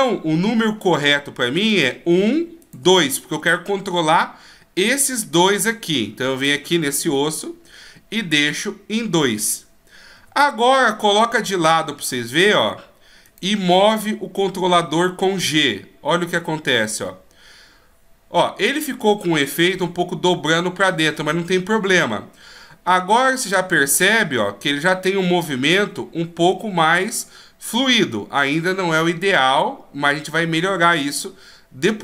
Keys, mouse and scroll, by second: 0.8-1.2 scroll down 2, 1.7 right click, 2.6 shift+right click, 6.4 right click, 8.4 click, 10.1 KP_3, 11.6-13.3 shift+scroll up 3, 13.3 right click, 14.9 g.